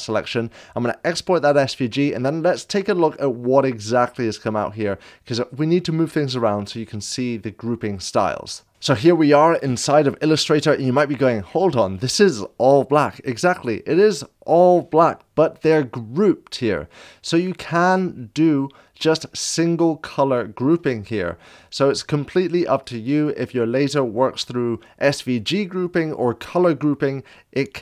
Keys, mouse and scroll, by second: 1.4 click, 8.7 scroll down 3, 17.0-20.8 drag, 21.7 click, 23.0-25.2 drag.